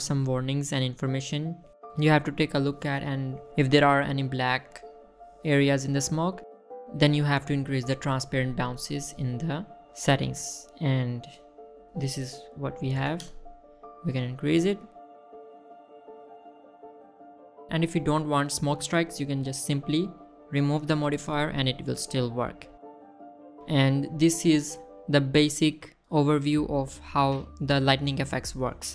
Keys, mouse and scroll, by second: 1.7 click, 2.5 click, 8.8 click, 10.0 click, 12.7-14.3 drag, 16.4 click, 16.5 middle click, 17.2 middle click, 17.3 middle click, 17.5 middle click, 21.2 click, 21.6-22.1 scroll down 2, 22.1 click, 22.3 middle click, 23.0 middle click, 23.8 middle drag, 24.0-24.5 scroll down 3, 24.3 shift+middle click, 24.8 shift+middle drag, 25.1 middle drag, 25.4 scroll down 2, 25.7 middle drag, 26.1 shift+middle drag, 26.2 scroll down 1, 26.4 middle drag, 26.9 middle click, 27.0 scroll up 2, 27.8-28.5 middle drag.